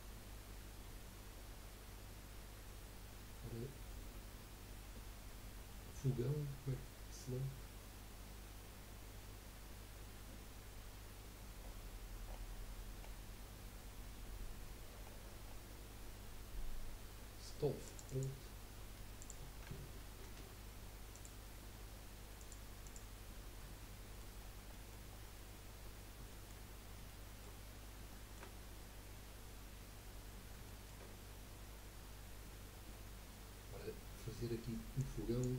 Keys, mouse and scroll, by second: 23.8-24.5 middle drag, 24.5 scroll down 2, 24.9 middle click, 25.1-26.3 scroll up 6, 26.3-26.7 shift+middle drag, 26.7 scroll up 3, 27.1-27.6 shift+middle drag, 27.6-28.0 scroll up 2, 28.1-31.1 shift+middle drag, 31.1-32.0 scroll up 1.